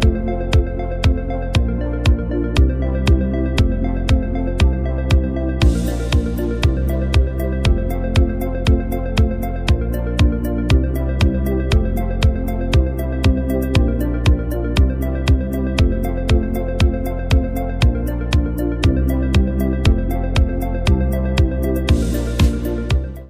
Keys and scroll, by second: 0.8 space, 3.4 z, 4.3 v, 7.3 super+-, 7.5 super+-, 8.2 space, 8.8 z, 10.2 v, 11.0 super+0, 14.4 space.